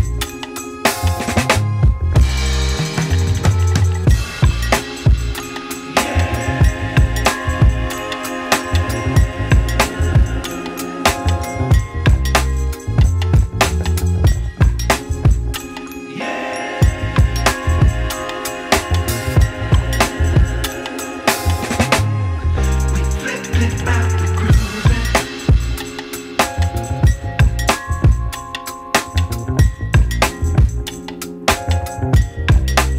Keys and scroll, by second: 8.5 ctrl+shift+g, 9.0 ctrl+shift+z.